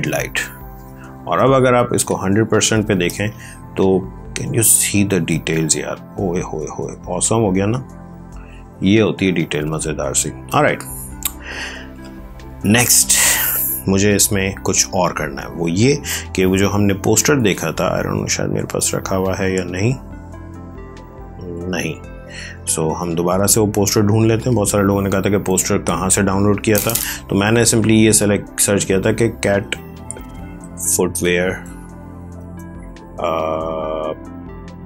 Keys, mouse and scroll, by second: 0.7 ctrl+space, 1.9 ctrl+1, 2.9 space, 3.2 click, 3.5 space, 5.4 click, 8.7 ctrl+space, 9.1 ctrl+click, 9.2 ctrl+space, 11.4 ctrl+click, 11.5 ctrl+space, 17.3 ctrl+super+space, 17.3 super+d, 21.4 alt+Tab, 24.3 click, 27.5-27.9 typing, 29.3-32.3 typing.